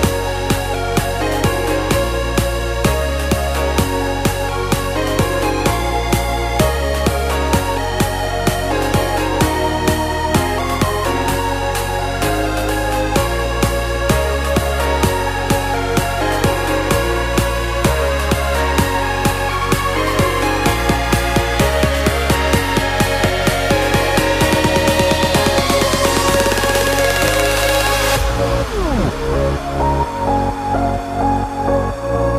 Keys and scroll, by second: 11.9-12.8 typing.